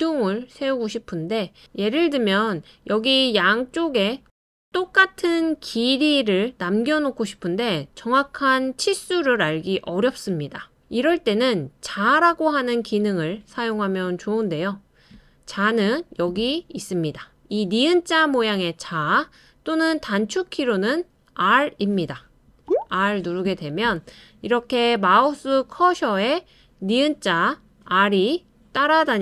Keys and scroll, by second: 22.5 ┐.